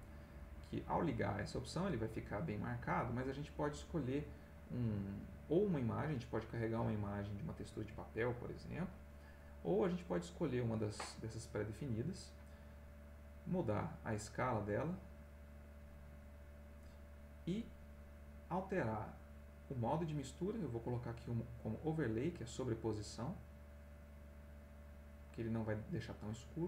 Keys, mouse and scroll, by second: 0.3 click, 9.3 click, 10.1 click, 13.2 click, 18.9-21.9 drag.